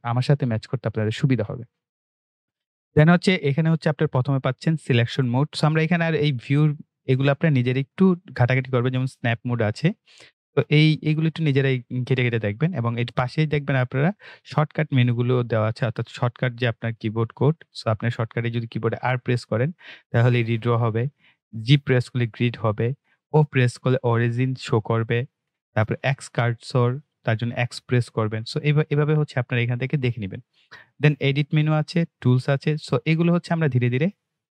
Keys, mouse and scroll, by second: 8.1 click.